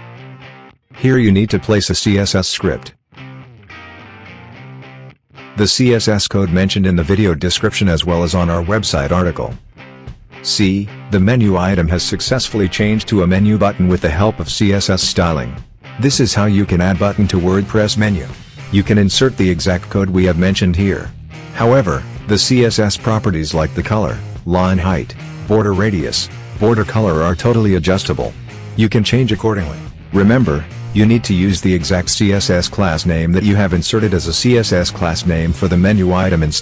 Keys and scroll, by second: 10.4 ctrl+v.